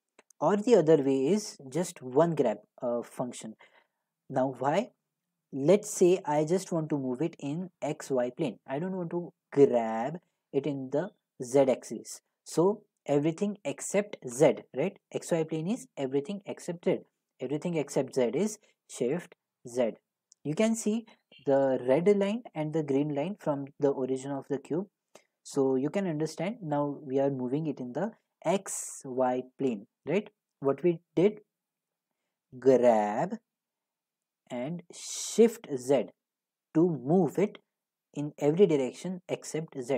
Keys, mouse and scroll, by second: 0.1 ctrl+z, 0.5 ctrl+z, 9.7 g, 19.7 z, 30.6 right click, 32.8 g, 35.9 z.